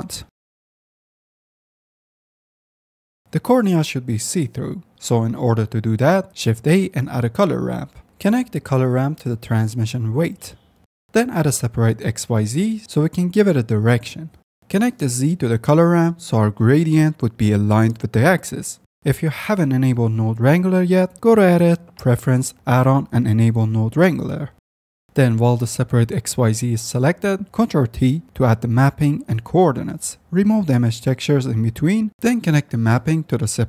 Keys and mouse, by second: 1.5 s, 1.8 ctrl+z, 2.1 s, 2.9 ctrl+z, 3.0 s, 4.3 click, 5.8 F10, 6.2 shift+a, 8.5 click, 9.5-10.4 drag, 10.8 shift+a, 11.8 e, 14.0-16.2 drag, 16.2 F10, 21.0-21.9 drag, 21.9-26.7 middle drag, 26.9 middle click, 28.8 ctrl+t, 30.0 click, 31.1 click, 31.5 x, 32.2-33.6 drag.